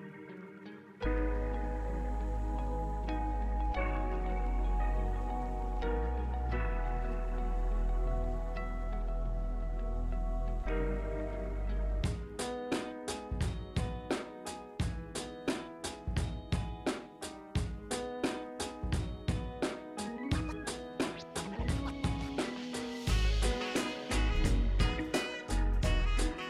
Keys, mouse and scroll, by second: 2.5 click, 5.0 scroll down 1, 5.7 click, 10.8 click, 15.1-16.7 drag, 20.9 scroll up 1, 22.3 scroll down 1, 22.9 scroll down 1.